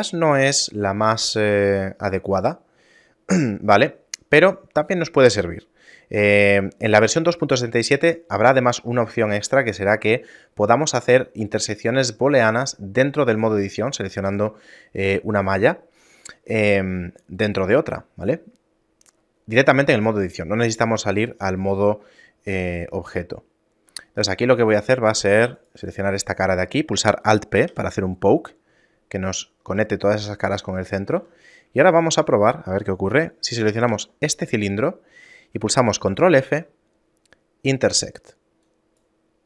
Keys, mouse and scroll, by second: 3.3 shift+middle click, 22.5 shift+middle click, 23.0 middle click, 23.5 shift+middle click, 25.0 ctrl+Tab, 26.0 right click, 27.8 alt+p, 31.3 a, 32.0 shift+middle click, 34.0 l, 35.0 shift+middle click, 36.4 ctrl+f.